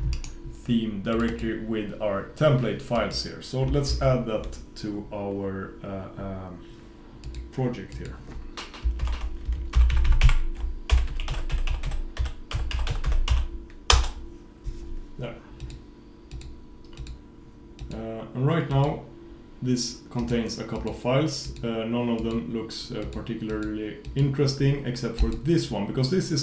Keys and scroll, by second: 4.0 super+s.